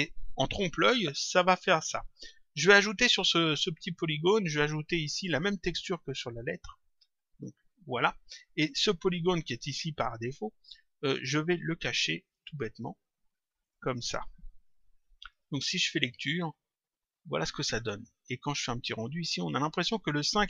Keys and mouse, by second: 6.0 click, 8.6 click, 12.2 click, 15.2 click, 16.6 click, 18.4 click.